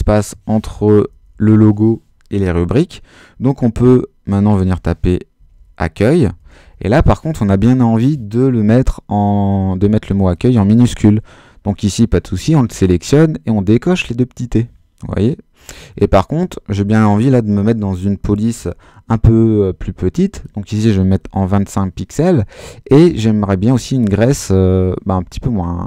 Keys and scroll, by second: 0.9 BackSpace, 3.8-6.9 typing, 21.2 2, 21.5 5.